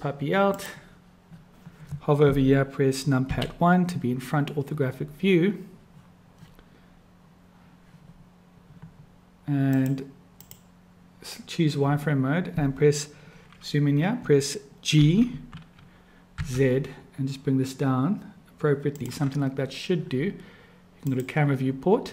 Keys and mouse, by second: 3.2 KP_1, 9.8 click, 10.3 click, 15.0 g, 21.2 click.